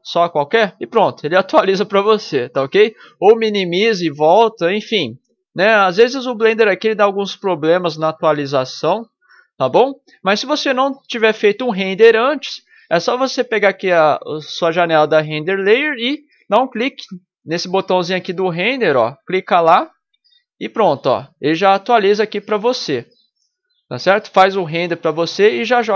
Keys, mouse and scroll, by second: 0.6 ctrl+Left, 1.4 ctrl+Left, 2.7 ctrl+Left, 3.6 ctrl+Left, 4.6 ctrl+Left, 5.3 ctrl+Left, 5.8 ctrl+Left, 7.4 ctrl+Left, 8.0 ctrl+Left, 8.5 ctrl+Left, 10.0 ctrl+Left, 11.0 ctrl+Left, 11.6 ctrl+Left, 12.1 ctrl+Left, 12.7 ctrl+Left, 13.5 ctrl+Left, 14.6 ctrl+Left, 15.3 ctrl+Left, 15.8 ctrl+Left, 16.5 ctrl+Left, 17.5 ctrl+Left, 18.5 ctrl+Left, 19.9 ctrl+Left, 20.4 ctrl+Left, 20.9 ctrl+Left.